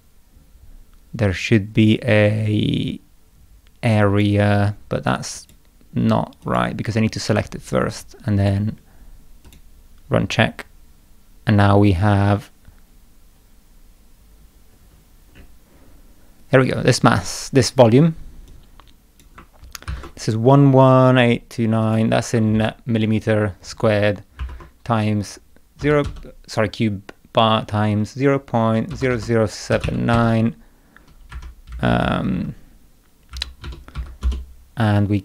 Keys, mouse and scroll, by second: 2.4 scroll up 2, 2.8 scroll down 2, 4.1 click, 5.4 click, 6.5 click, 8.4 click, 9.5 click, 14.7 middle click, 15.4 middle click, 18.5 click, 19.9 ctrl+c, 21.9 click, 22.5 ctrl+v, 24.4 shift+8, 34.2 Return.